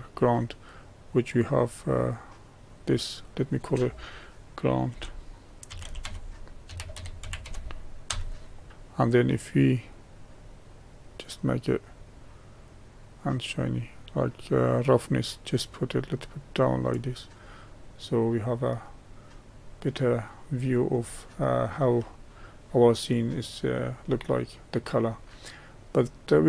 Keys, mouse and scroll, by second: 3.3-15.3 drag, 17.7-19.1 middle drag, 19.1-19.6 scroll up 1, 19.6-20.3 scroll up 1, 20.3 click.